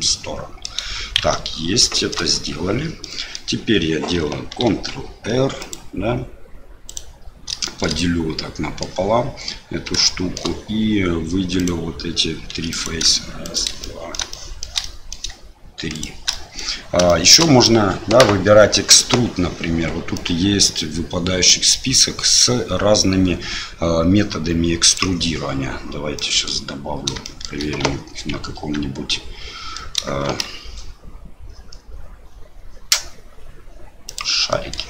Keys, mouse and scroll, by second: 1.2 shift+z, 1.9 shift+click, 3.0 click, 4.6 ctrl+r, 7.7 shift+click, 8.0 click, 10.0 shift+click, 11.6 click, 12.5 3, 12.7 click, 13.4 shift+click, 13.8 middle click, 14.3 shift+middle click, 14.6 shift+click, 14.8 middle click, 15.9 shift+click, 16.3 middle click, 17.0 shift+middle click, 20.1-25.3 drag, 26.1 middle click, 27.2 shift+middle click, 27.8 a, 28.5 Tab, 29.7 middle click, 30.2 shift+a, 34.7 middle click.